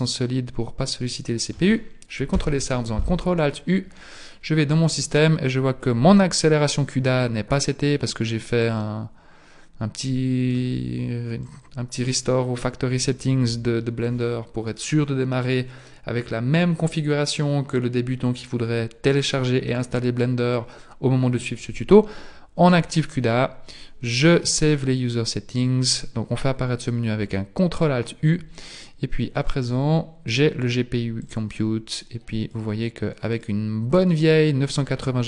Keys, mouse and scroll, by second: 2.4 ctrl+alt+u, 30.2 click, 31.3 click, 32.5 click.